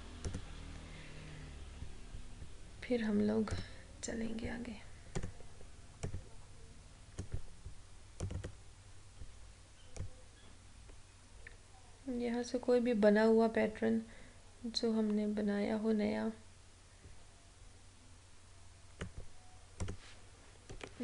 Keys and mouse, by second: 0.6 u, 3.6 click, 5.4 u, 6.0-19.9 drag.